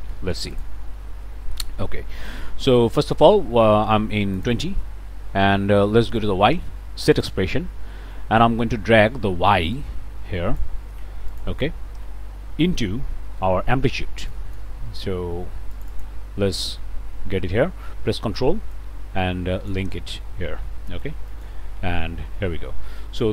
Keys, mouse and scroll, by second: 0.1 Return, 0.5 click, 1.2 click, 2.2 click, 4.3 click, 6.1 click, 7.1 click, 8.1 click, 9.7-10.8 ctrl+drag, 11.3 click, 12.6 *, 14.3 click, 15.7 click, 18.7-19.9 ctrl+drag, 21.3 click, 21.9 BackSpace.